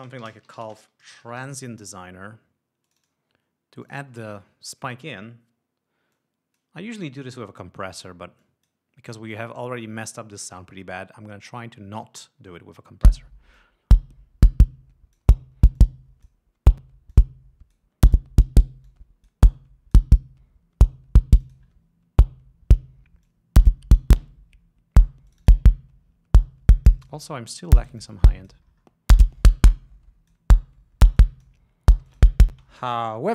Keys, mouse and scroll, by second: 0.4-2.5 typing, 3.1 click, 4.1-5.5 drag, 6.4 click, 8.7 click, 13.3 l, 13.8-15.6 drag, 16.1 click, 17.4 click, 19.2 click, 21.7 click, 23.6 click, 25.6 click, 29.0-29.3 scroll down 2, 33.2 space.